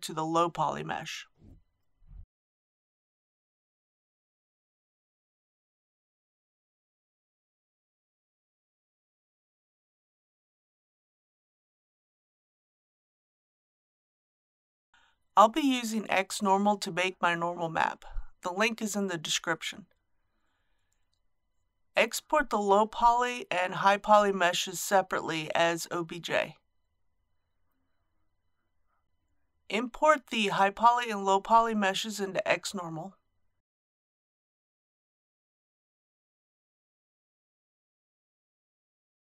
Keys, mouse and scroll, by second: 14.2 ctrl+a, 23.0-39.2 drag.